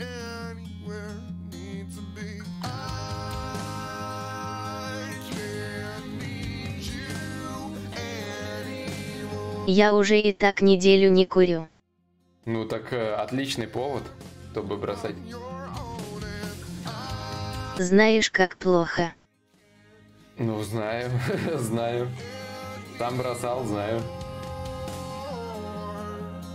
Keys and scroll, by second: 2.8 ctrl+z.